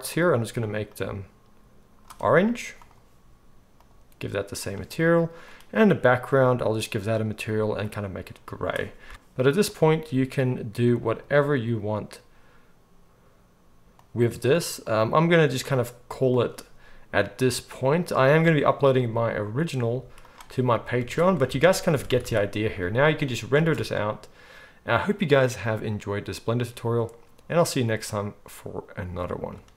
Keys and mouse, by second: 2.7 click, 2.7 middle click, 3.7-5.5 drag, 3.7-5.5 middle drag, 6.2 click, 6.2 middle click, 7.1-10.0 right drag, 10.0-16.3 middle drag, 16.3 right click, 17.1-19.8 middle drag, 19.8 z, 20.3 middle drag, 20.9 ctrl+s, 21.5 alt+a, 21.9 ctrl+s, 22.1 ctrl+s, 22.2 ctrl+s, 23.5 space.